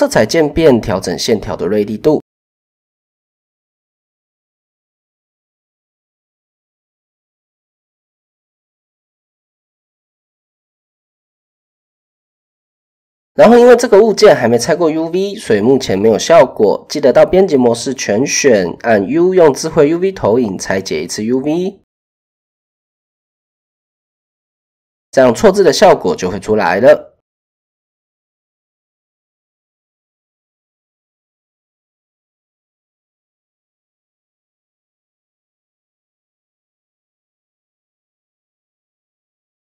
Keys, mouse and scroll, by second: 0.2 click, 1.6 click, 3.7-5.9 drag, 6.2 click, 9.3 click, 11.4 click, 13.1 click, 15.1 Tab, 18.2 u, 24.5 Tab, 27.6-36.1 shift+middle drag, 38.4 middle click.